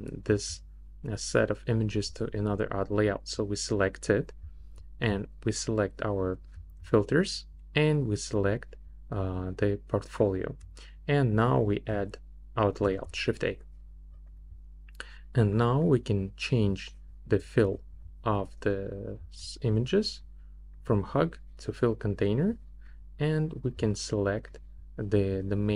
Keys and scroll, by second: 12.9 shift+a.